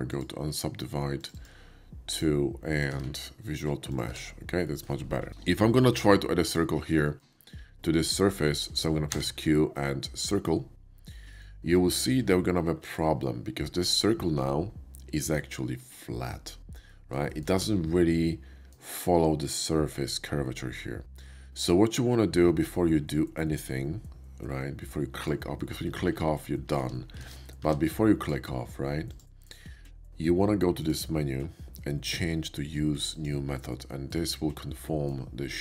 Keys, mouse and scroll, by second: 0.0 click, 1.2 click, 1.3 click, 2.1 click, 2.9 ctrl+a, 3.9 click, 4.1 Tab, 4.6 middle drag, 6.4 shift+click, 7.0 shift+middle click, 7.4 shift+middle click, 8.5 shift+middle drag, 9.0 q, 11.1 click, 12.8 click, 13.1-15.3 middle drag, 16.7 middle click, 17.3 shift+middle click, 17.9 shift+middle click, 22.5-24.8 middle drag, 25.1 click, 27.1 ctrl+z, 27.2 ctrl+z, 27.6 q, 28.1 click, 29.1 click, 30.8 click, 33.0 click, 33.9-34.9 middle drag.